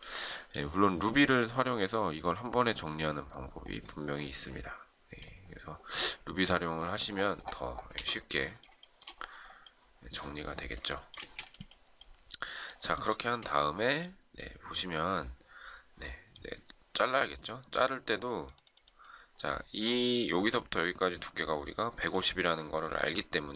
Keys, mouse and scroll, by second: 7.8 z, 8.7 shift+middle click, 10.9 shift+middle click, 11.1 space, 12.9 shift+middle click.